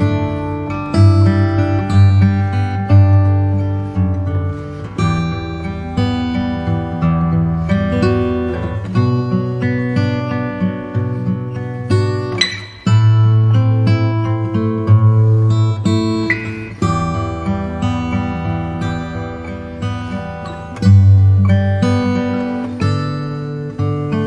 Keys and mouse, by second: 5.0 click, 5.6-7.7 middle drag, 9.7-11.9 right drag, 13.0 KP_7, 21.5 r.